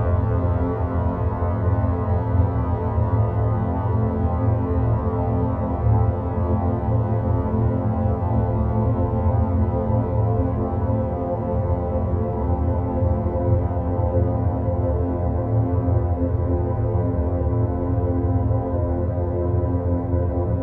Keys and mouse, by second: 1.8 g, 6.1 e, 11.7 e, 15.3-16.7 middle drag, 17.6-18.8 middle drag, 19.8 click.